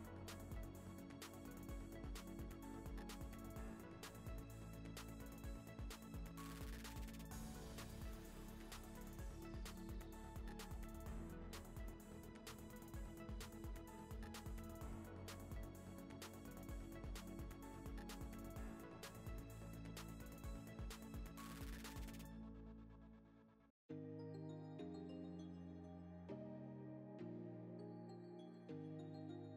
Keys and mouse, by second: 0.7-1.0 drag, 1.9 click, 3.0 Tab, 3.2 z, 3.5-4.0 middle drag, 4.4 n, 4.8 click, 7.2 click, 7.5 click, 8.7 click, 9.0 KP_0, 9.2 KP_0, 9.9 g, 11.0 shift+click, 11.4 shift+click, 12.0 ctrl+click, 12.5 ctrl+p, 13.0 click, 13.3 s, 14.1 shift+click, 14.2 s, 14.5 g, 15.3 ctrl+a, 16.1 click, 16.5 shift+click, 16.7 g, 17.1 s, 17.7 click, 17.9 s, 18.6 shift+click, 18.9 shift+click, 19.1 g, 19.8 ctrl+click, 20.0 g, 22.6 click, 22.8 shift+middle click, 23.7 click, 24.0-24.6 drag, 25.1 click, 26.8-28.2 shift+drag, 28.3 right click, 29.0 drag, 29.3 click.